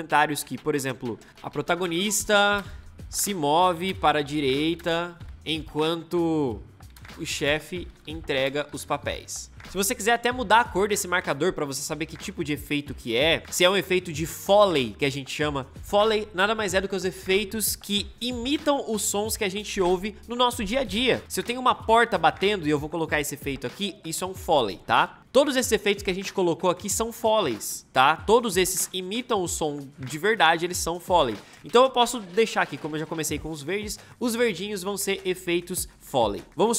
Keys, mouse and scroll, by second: 1.3 Return, 1.3-9.6 typing.